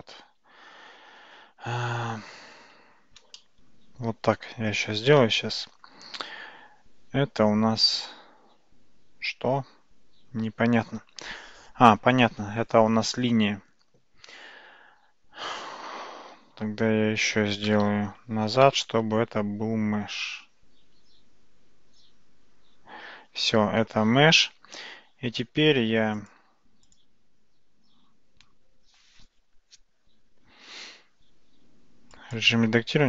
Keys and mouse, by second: 0.1 ctrl+z, 0.4 ctrl+z, 0.8 ctrl+z, 1.8 ctrl+z, 2.8 ctrl+z, 3.4-4.4 middle drag, 5.1 alt+z, 5.4-5.9 middle drag, 7.9-10.5 drag, 17.7 ctrl+z, 18.7 ctrl+z, 21.0 ctrl+z, 26.2 click, 31.7 Tab, 32.2 click.